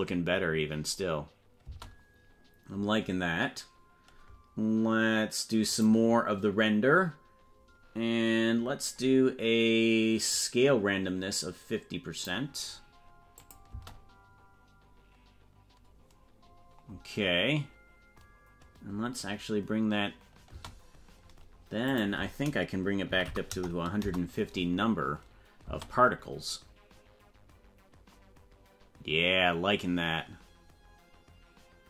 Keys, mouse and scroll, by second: 1.6 space, 5.6 click, 8.5-9.3 scroll down 6, 10.3-12.3 drag, 13.5 click, 13.7 space, 20.5 space, 21.8-24.5 drag, 25.6 space.